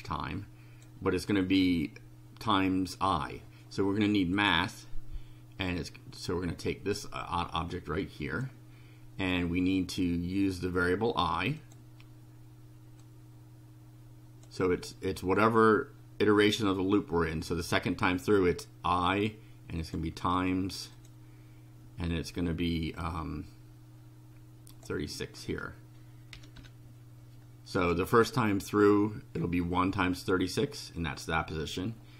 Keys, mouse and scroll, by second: 4.4 click, 6.7-8.6 drag, 11.6 click, 13.0-14.6 drag, 19.8 click, 21.0 click, 24.7 click, 26.3 3, 26.6 6, 27.8 click.